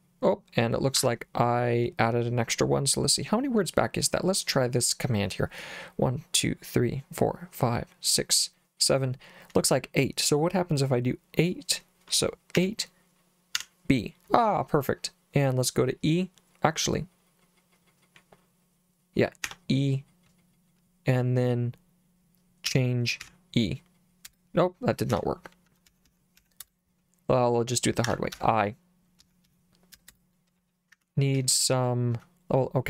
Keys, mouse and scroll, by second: 1.0 Escape, 12.6 8, 13.6 b, 19.5 e, 22.7 c, 23.2 e, 24.3 BackSpace, 25.2 Escape, 25.4-26.9 typing, 28.1 Escape, 28.4-30.1 typing, 31.0 Escape, 31.4 l, 31.5 l, 32.2 h.